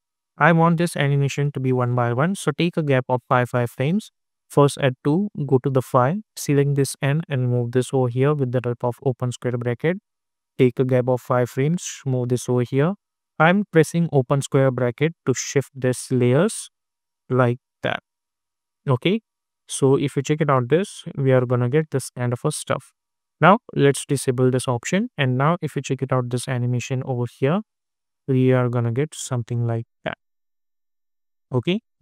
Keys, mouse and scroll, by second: 0.5 =, 1.1 =, 5.4 click, 8.8 [, 10.4 click, 11.8 [, 12.7 click, 14.1 [, 15.2 click, 16.4 [, 17.2 click, 18.3 [, 18.9 -, 19.8 click, 20.4 space, 22.6-24.9 drag, 25.0 space, 29.4 space, 31.0 -, 31.9-32.0 drag.